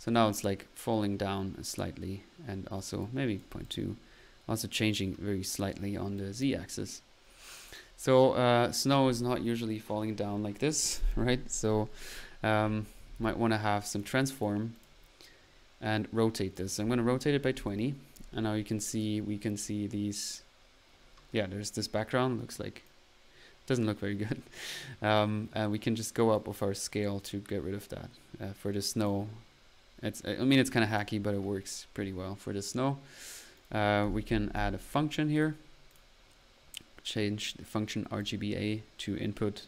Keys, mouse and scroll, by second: 0.0-0.5 typing, 6.2 click, 7.5 click, 8.3 middle click, 12.0 click, 12.7-13.4 typing, 14.0 drag, 14.4 click, 14.8-15.2 drag, 15.2-15.7 middle drag, 16.3 click, 18.5 middle click, 18.9 click, 19.0 click, 29.2 click, 30.9 click, 33.5 right click, 33.7-34.5 typing, 35.3 right click.